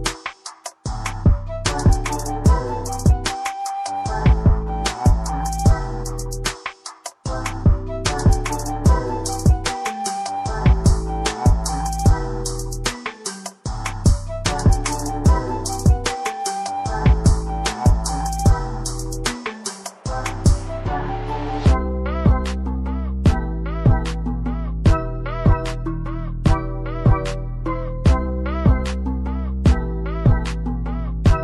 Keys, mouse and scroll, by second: 6.6 click, 7.1 click, 8.6 scroll down 1, 9.0 scroll up 1, 9.7 click, 11.5 double click, 13.1 click, 14.7 scroll down 1, 15.1 click, 15.7 scroll up 1, 15.9 click, 16.7 ctrl+v, 17.7 click, 19.4 click, 23.8 click, 28.3 scroll up 1, 29.5 shift+click, 30.4-30.8 scroll down 1.